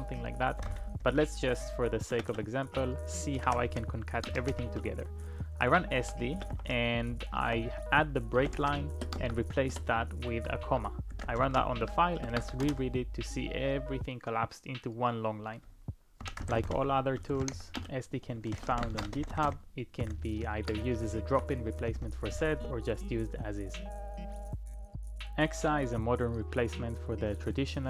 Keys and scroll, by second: 0.4-4.5 typing, 6.0-9.2 typing, 9.7 Return, 10.9-11.9 typing, 12.6 Return, 16.0-18.9 typing, 19.1 ctrl+u, 19.3 ctrl+u, 19.5 ctrl+u, 20.0 ctrl+d, 20.8 j, 21.0-21.6 j.